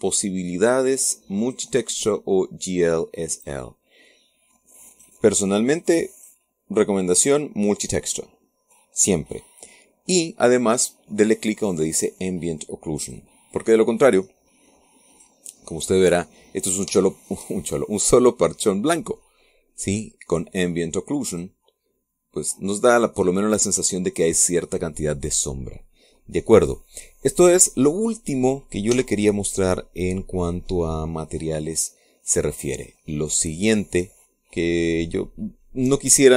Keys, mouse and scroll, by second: 2.2 click, 4.1 click, 5.7 click, 6.9 click, 13.8 click, 15.9 click, 16.4 click, 17.3-17.6 scroll up 1, 17.6 scroll down 1, 17.8 shift+click, 18.3 shift+middle click, 18.4-20.2 shift+drag, 22.1 click, 22.8-23.2 scroll down 1, 23.2 middle click, 24.1-26.9 drag, 27.0 scroll down 2, 27.3 middle click, 27.4-28.6 drag, 29.7 n.